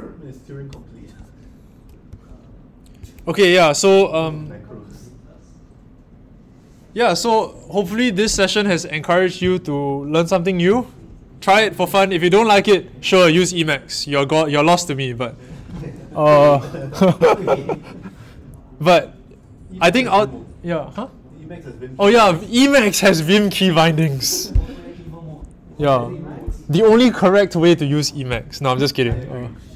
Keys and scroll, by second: 2.9 Down, 2.9 Up.